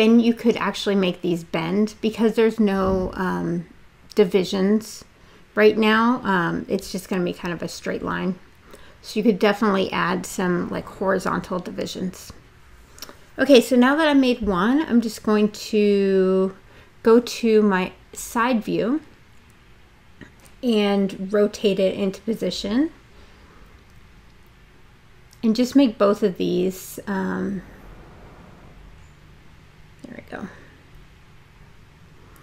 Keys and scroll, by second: 2.4 w, 8.6 space, 27.7 space.